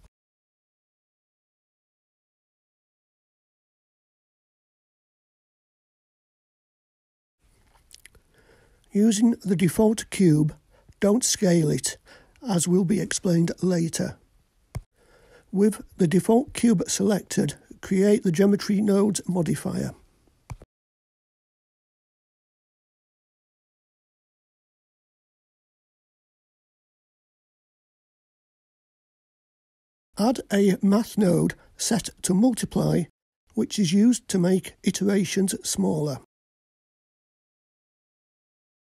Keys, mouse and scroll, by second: 7.3 click, 9.4 click, 12.0-13.8 drag, 15.6-17.6 drag, 19.0 click, 20.1 click, 21.0-24.9 drag, 21.8 g, 24.9-25.5 scroll up 2, 26.3-27.1 scroll up 2, 27.5 click, 28.1-30.1 drag, 30.8-32.2 drag, 32.4 click, 33.0-38.2 drag.